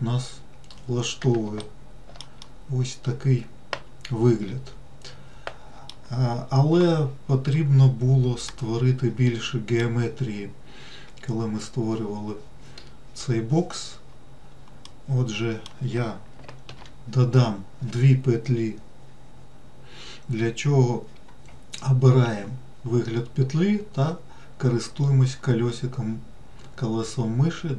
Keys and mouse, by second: 2.7-6.2 middle drag, 8.8-10.1 middle drag, 15.2 middle click, 17.0 ctrl+r.